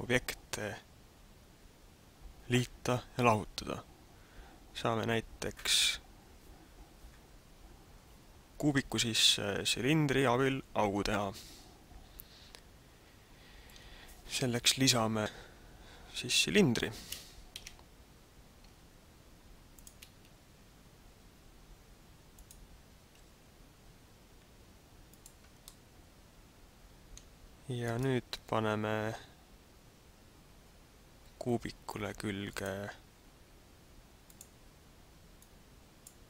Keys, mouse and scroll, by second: 16.8 a, 17.7 shift+a, 21.0 s, 22.4 click, 22.9 s, 25.2 click, 25.7 middle click, 27.8 right click, 32.6 click, 34.3 click, 35.5 click.